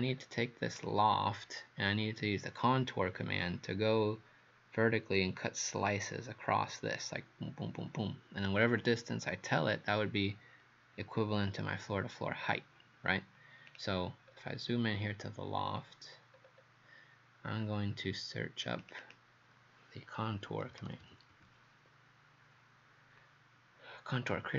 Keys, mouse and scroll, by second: 0.2 scroll up 1, 0.8 click, 14.3-15.6 scroll up 2, 15.6 scroll down 2, 16.4 scroll down 1, 17.7 scroll up 1, 18.8 click, 19.0 click, 20.3-22.0 typing.